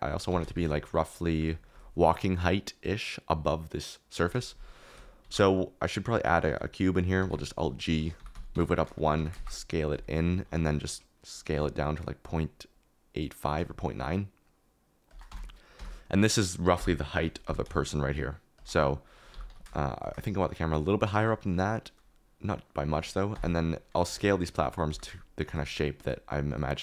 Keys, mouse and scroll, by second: 0.0 g, 0.2 z, 5.2 shift+a, 7.2 alt+g, 8.1-10.3 typing, 11.5 s, 15.0 shift+click, 15.2 Tab, 15.7 Tab, 16.7 KP_1, 17.4 g, 19.3 g, 19.4 z, 23.3 KP_1, 24.1 s, 24.8 g, 25.7 middle click.